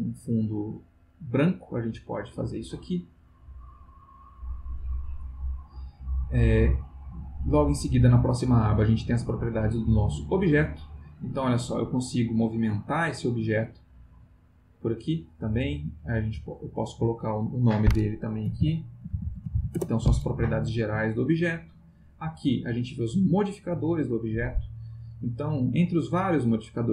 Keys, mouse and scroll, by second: 0.6 click, 3.6 click, 4.3 click, 6.2 click, 11.4-13.3 drag, 13.4-14.6 drag, 14.8 click, 15.9 click, 16.8 click, 18.2-20.0 typing, 22.0 click, 23.8 click.